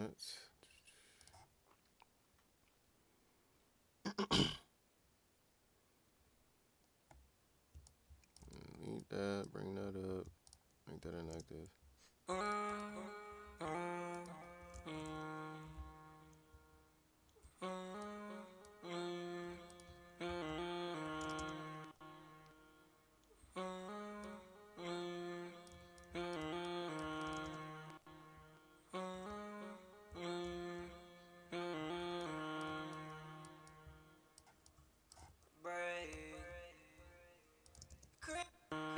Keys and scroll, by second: 14.9 ctrl+Down, 15.0 ctrl+Down, 19.8 e, 25.7-27.4 typing, 35.0-36.1 typing, 38.3 shift+s.